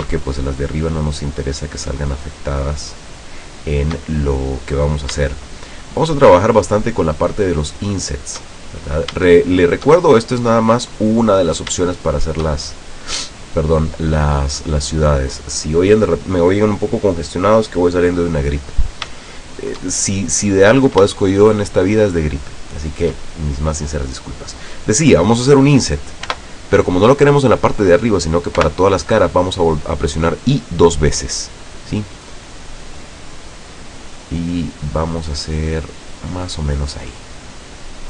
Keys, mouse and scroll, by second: 0.6 shift+right click, 1.4 shift+right click, 1.9 shift+right click, 2.4 shift+right click, 3.2 shift+right click, 3.8 shift+right click, 4.2 shift+middle click, 5.9 shift+click, 6.5 shift+click, 7.5 shift+click, 7.7 shift+right click, 8.2 shift+right click, 8.7 shift+middle click, 9.8 shift+right click, 10.2-11.4 shift+middle drag, 12.3 shift+right click, 12.7-13.0 shift+scroll down 2, 13.2-14.6 middle drag, 14.8-15.3 scroll up 2, 18.3-18.6 scroll down 2, 18.9 scroll down 2, 19.5 shift+middle click, 20.3-21.2 shift+scroll up 5, 21.4 shift+middle click, 22.7 shift+middle click, 26.4 i, 28.7 i, 36.3 click.